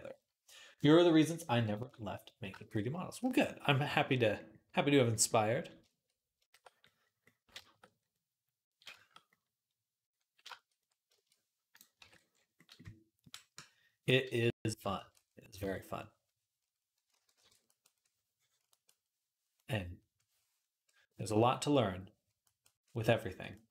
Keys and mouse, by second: 1.3 middle click, 3.2 shift+click, 3.9 click, 3.9 right click, 4.2-5.7 drag, 5.7-7.3 shift+middle drag, 9.7 right click, 10.1 right click, 10.3-11.7 shift+middle drag, 11.8 ctrl+Tab, 14.8 shift+click, 14.9-17.5 right drag, 15.4 m, 15.9-17.5 drag, 17.0 alt+q, 17.2 alt+q, 17.5-23.4 middle drag, 23.5-23.7 drag.